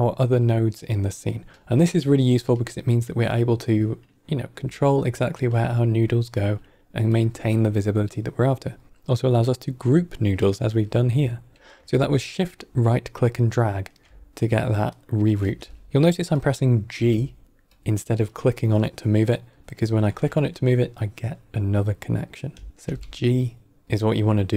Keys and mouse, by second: 7.0 click, 12.3-13.8 shift+right drag, 14.9 shift+right click, 15.5 g, 16.8 g, 18.2-22.6 drag, 22.7 g.